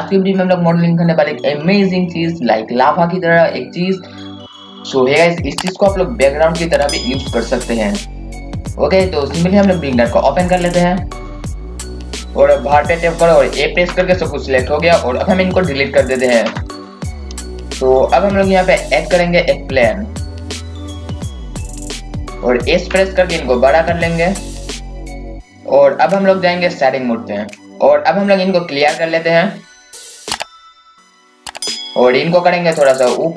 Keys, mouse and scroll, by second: 8.2 click, 13.9 a, 16.4 Delete, 20.1 click, 22.8 s, 25.5-26.7 scroll up 1, 27.6-33.3 drag.